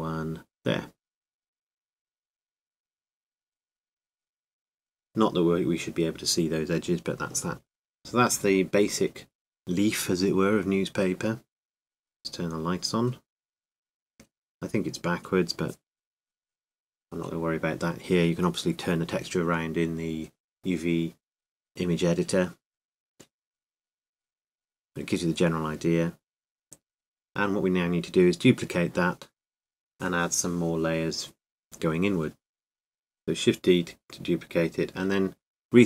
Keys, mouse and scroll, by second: 0.0 ctrl+r, 4.6 Tab, 4.6 click, 5.5-7.1 middle drag, 7.1 click, 8.2-10.9 drag, 12.4 click, 13.3 middle click, 16.8-18.8 middle drag, 24.7-27.5 drag, 27.5-29.0 middle drag, 29.1 middle click, 30.7 shift+d, 33.0 s.